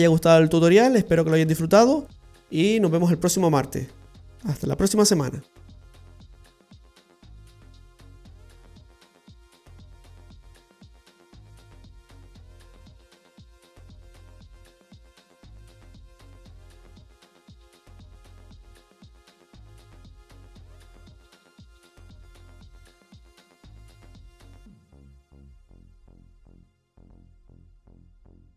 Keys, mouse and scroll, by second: 8.5 space.